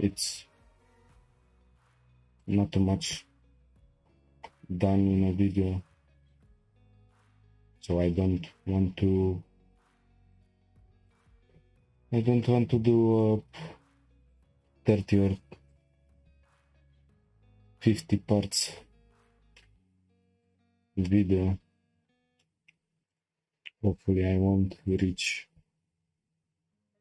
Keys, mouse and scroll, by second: 5.8 k, 12.6 k, 19.2-19.5 scroll down 1, 19.5 shift+middle click, 20.4 click, 21.0 shift+middle click, 21.6-22.4 scroll up 1, 22.4 shift+middle click, 22.8 scroll up 1, 24.9 click, 25.8 g.